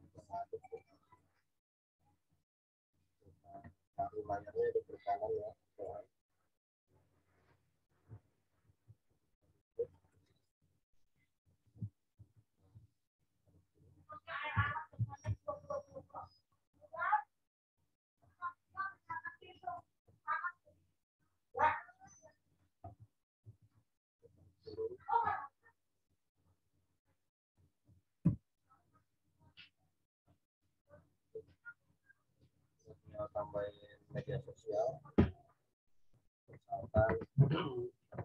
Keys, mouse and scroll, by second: 0.6 right click, 3.2 click, 5.8 right click, 7.6 click, 10.0 shift+right click, 11.4 shift+click, 12.1 ctrl+t, 13.2 alt+shift+click, 15.0 Return, 18.6 right click, 19.7 click, 21.1 shift+right click, 22.4 shift+click, 23.4 ctrl+t, 25.8 shift+click, 28.2 Return, 28.8 click, 36.8 scroll up 1, 37.4-38.2 scroll up 1.